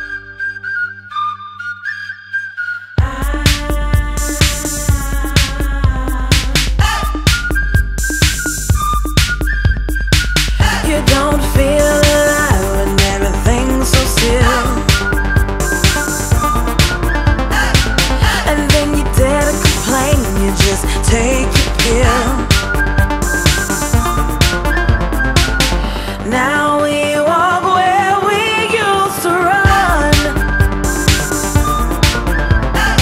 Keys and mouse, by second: 1.3 click, 3.5 click, 6.2 click, 8.1 click, 10.8 click, 14.3 click, 17.6 click, 17.9 right click, 19.2 right click, 19.3 click, 20.2 double right click, 21.0 click, 22.4 click, 25.7 double right click, 26.5 click, 28.1 click, 28.2 right click, 29.0 click, 31.4 click.